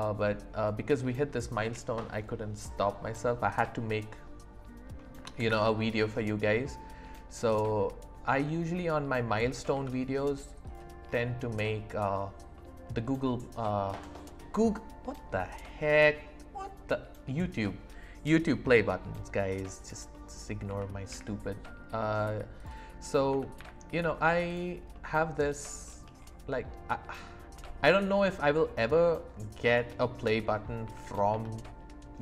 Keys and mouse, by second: 5.4 shift+a, 8.8 middle click, 9.8 s, 10.7 click, 11.6 middle click, 12.6 middle click, 20.1 middle click, 20.7 s, 21.1 y, 22.6 click, 23.3 s, 23.6 z, 24.9-25.5 drag, 25.9 shift+middle click, 27.5 s, 30.8 s, 31.3 z.